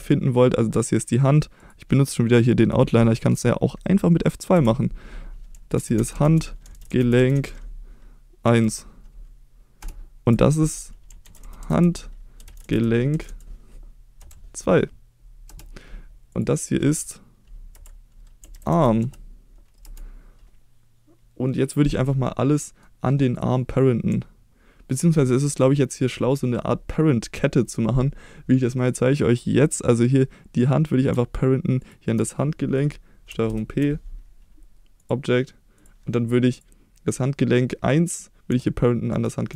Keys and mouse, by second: 0.0 middle click, 1.6 click, 4.5 F2, 10.2 F2, 16.3 click, 17.7 F2, 22.5 middle drag, 23.3-24.1 drag, 25.5-26.1 middle drag, 28.7 middle drag, 31.8 shift+click, 33.4 ctrl+p, 35.8-36.6 drag, 39.1 shift+click.